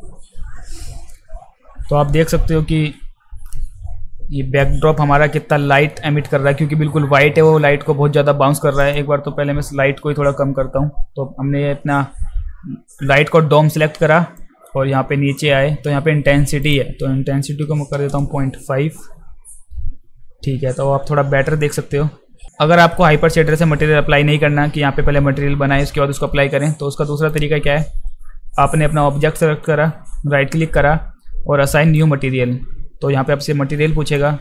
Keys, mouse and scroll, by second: 2.7 ctrl+s, 8.8 click, 14.4 click, 16.6 click, 23.5 click, 27.2 click, 29.6-31.9 right drag, 34.1 click.